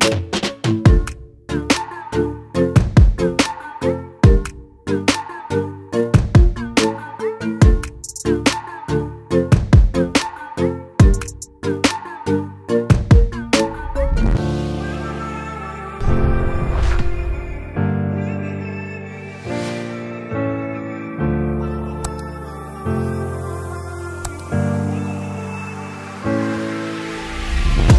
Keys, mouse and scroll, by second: 5.6-19.6 drag, 21.9 click, 26.6 click.